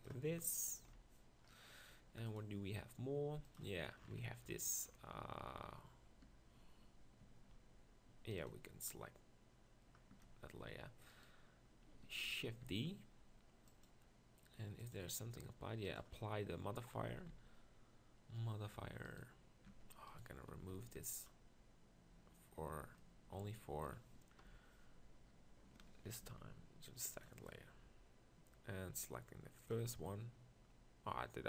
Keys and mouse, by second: 0.9 KP_1, 12.5 shift+d, 13.9-16.0 drag, 16.5-18.1 drag, 18.2 Tab, 18.3 z, 19.7 Tab, 20.8 b, 24.4 KP_1, 27.2 m.